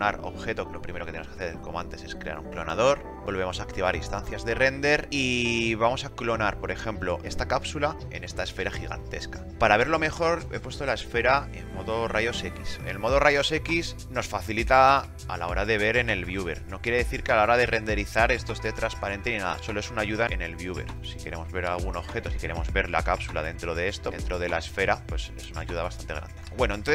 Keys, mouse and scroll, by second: 13.2 scroll.